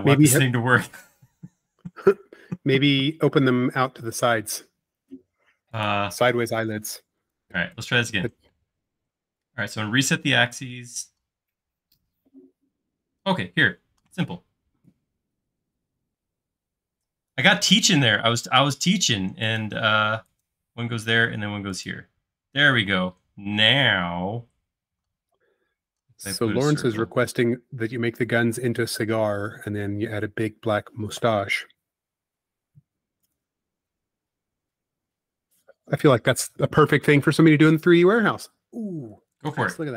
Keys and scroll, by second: 4.3-4.8 typing, 6.9 e, 8.6 space, 10.4 typing, 26.7 c, 32.1 Right, 38.3 space.